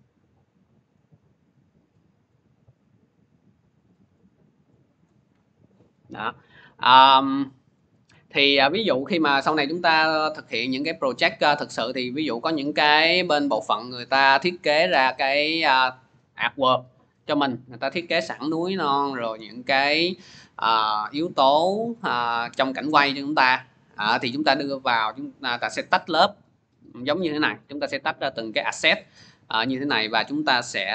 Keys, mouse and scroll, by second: 0.7 scroll, 4.8 click, 6.3-7.6 scroll, 7.6 click, 28.7 click, 30.0 click, 30.4 click.